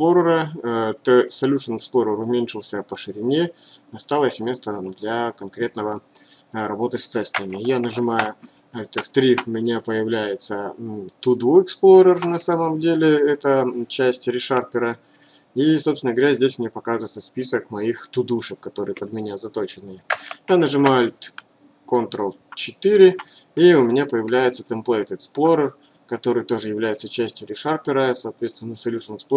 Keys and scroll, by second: 8.6 ctrl+alt+3, 21.4 ctrl+alt+4.